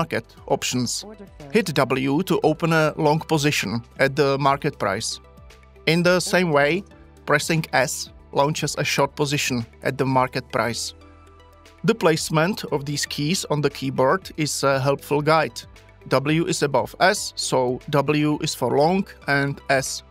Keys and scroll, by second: 2.4 w, 8.1 s.